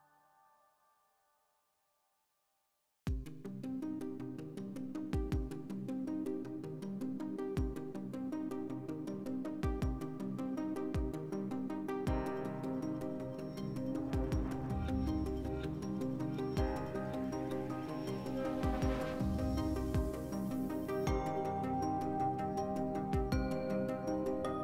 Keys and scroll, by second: 0.3 x, 7.4 alt+q, 13.7 s, 15.0-15.9 typing, 19.1 x, 20.8 s, 22.2 ctrl+z.